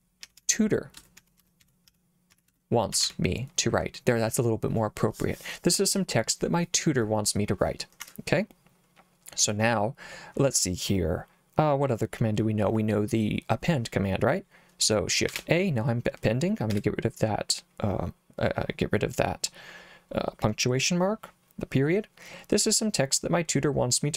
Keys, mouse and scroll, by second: 0.0-3.5 typing, 8.0 Escape, 15.3 shift+a, 16.7 BackSpace.